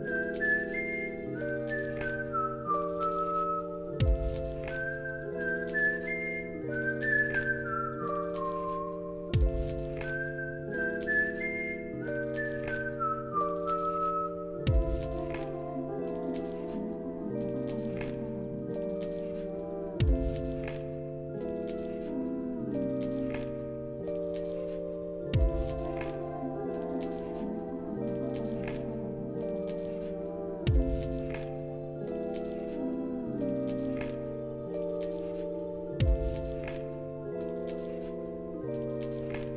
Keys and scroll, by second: 3.2 t, 13.8 Return, 18.6 t, 20.3 ctrl+s, 31.1 ctrl+v, 31.8 ctrl+s.